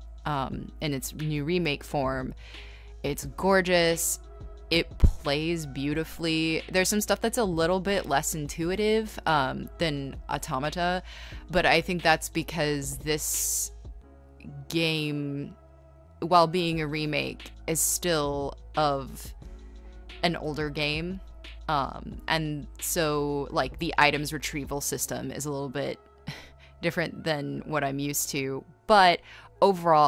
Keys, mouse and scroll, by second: 0.0-2.3 typing, 5.7 ctrl+z, 6.6 ctrl+z, 8.2-10.5 typing, 12.3 ctrl+z, 16.5 ctrl+z, 19.5-20.7 typing, 22.0-27.0 typing, 25.9 ctrl+z, 28.2 e, 28.5 b.